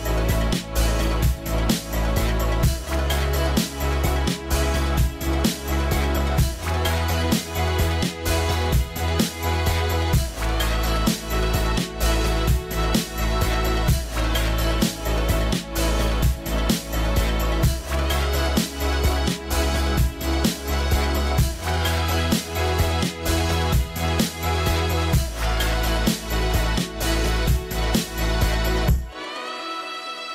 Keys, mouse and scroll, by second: 5.9 scroll down 1, 6.0 middle click, 7.0-7.6 scroll up 1, 15.7 scroll down 1, 17.6 middle click, 17.7-18.7 scroll up 1, 18.9 middle click, 20.9 middle click, 23.0 middle click.